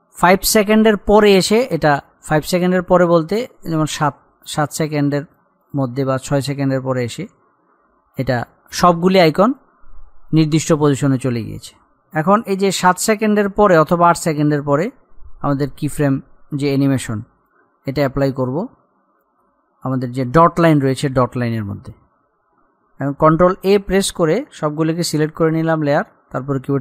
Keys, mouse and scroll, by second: 23.7 ctrl+Num_Lock, 24.2 ctrl+a.